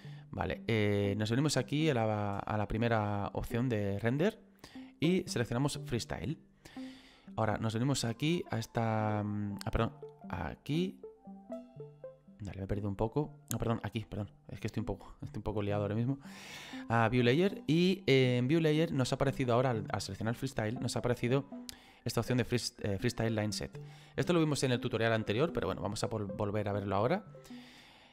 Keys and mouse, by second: 0.1 click, 6.0 click, 7.6 click, 10.1 click, 13.0 click.